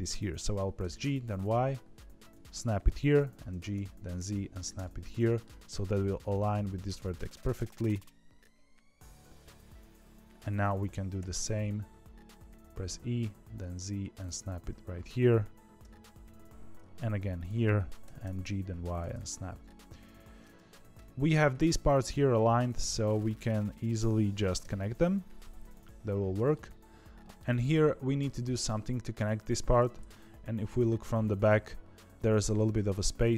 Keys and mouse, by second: 0.7 g, 3.4 g, 4.7 middle click, 8.4 KP_1, 8.8 KP_3, 11.1 e, 15.8 e, 18.0 g, 19.1 middle click, 19.9 middle click, 20.5 z, 20.9 middle click, 21.8 middle click, 22.6 click, 24.5 f, 24.8-26.5 middle drag, 27.1 middle click, 28.6 middle click, 29.9 KP_1, 30.2 KP_9, 30.9 z.